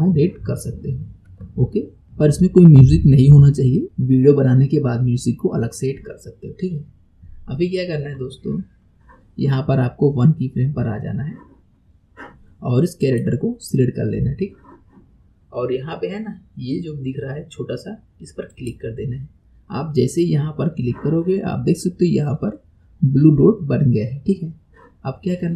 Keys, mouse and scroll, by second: 8.1-8.8 scroll up 1, 13.0 click, 18.5 click.